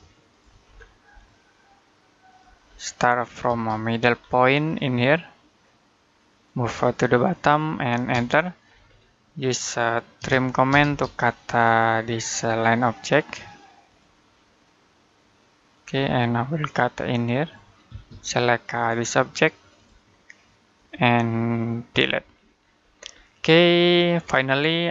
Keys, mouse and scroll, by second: 0.5 scroll up 1, 1.0 click, 2.4-2.8 scroll down 1, 2.8 middle click, 3.2 scroll up 1, 3.3 space, 3.9-4.2 scroll down 1, 4.2 middle click, 6.1 click, 7.9 space, 10.0-10.5 typing, 12.1 click, 15.9-16.5 scroll up 1, 17.7 space, 18.0 click, 21.7 Delete, 22.4-23.6 scroll down 1, 23.8 middle click, 24.4-24.9 scroll down 1.